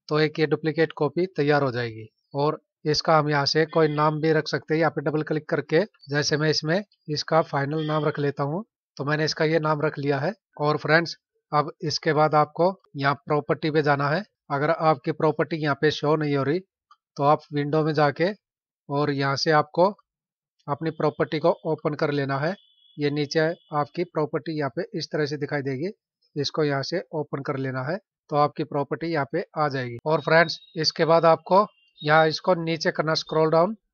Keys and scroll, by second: 30.0 F9.